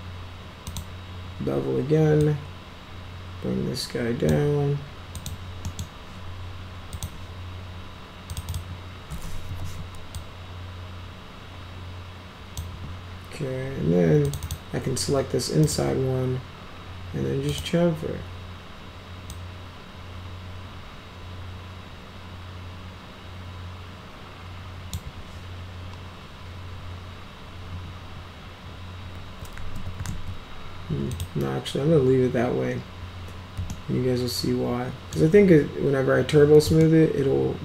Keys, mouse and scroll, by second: 0.6 click, 2.1-4.2 drag, 5.1 click, 5.6 middle click, 6.9 click, 8.2 click, 8.4 click, 9.4 r, 10.1-12.5 drag, 14.2 click, 14.4 click, 15.5 right click, 17.4 click, 19.2-24.8 drag, 29.5 ctrl+z, 30.0 ctrl+z, 31.0 click, 33.6-35.0 alt+middle drag, 36.7-37.6 alt+middle drag.